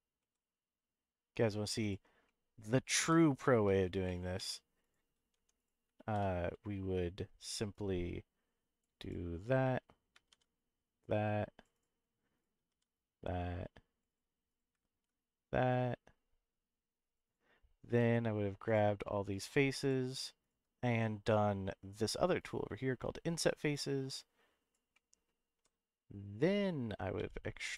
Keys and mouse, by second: 0.2 z, 1.8 click, 2.2 middle click, 3.0 KP_Decimal, 4.0 middle click, 4.4 Tab, 4.8 click, 5.3 Tab, 5.6 click, 6.0 ctrl+r, 9.0 click, 10.3 ctrl+r, 11.7 click, 12.3 click, 14.1 click, 14.5 click, 17.2 click, 18.8 shift+3, 19.3 shift+click, 19.8 shift+click, 22.4 click, 23.8 click, 24.9 middle click, 25.5 s, 27.1 e, 27.6 right click.